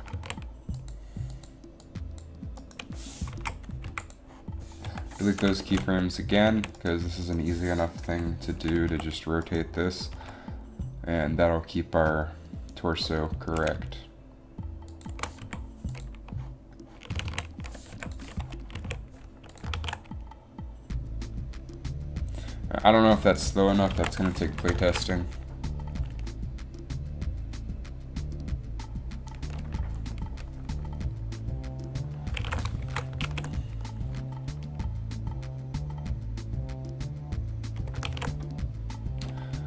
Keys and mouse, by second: 0.4 a, 3.5 Up, 3.9 Delete, 4.3 Delete, 5.0 KP_7, 5.2 KP_7, 6.6 a, 8.4 KP_7, 9.0 r, 10.3 r, 15.5 i, 17.3 a, 17.4 a, 18.0 i, 18.9 a, 19.9 alt+a, 24.2 alt+a, 24.6 shift+Left, 24.9 alt+a, 32.6 alt+a, 33.0 shift+Left, 33.3 alt+a, 38.3 alt+a.